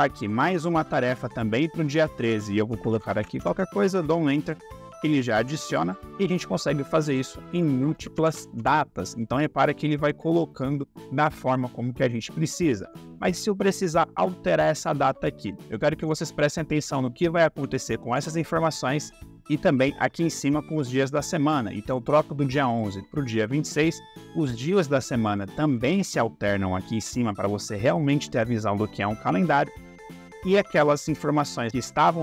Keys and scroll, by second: 2.4-3.6 typing, 7.7-8.7 typing.